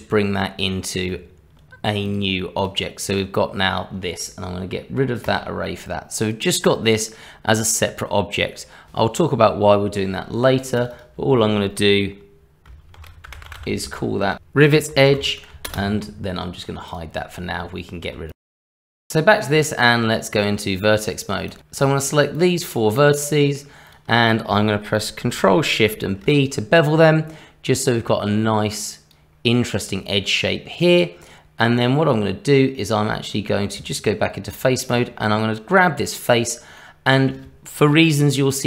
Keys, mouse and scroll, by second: 1.1 Tab, 2.0 click, 2.6 click, 10.7 click, 10.9 click, 16.9 click, 17.6 Tab, 18.3 click, 18.9 middle click, 19.5 Tab, 21.5 click, 21.6 shift+click, 22.3 shift+click, 23.1 click, 25.9 ctrl+shift+b, 33.2 middle click, 33.7 Tab, 34.8 click, 36.8 middle click.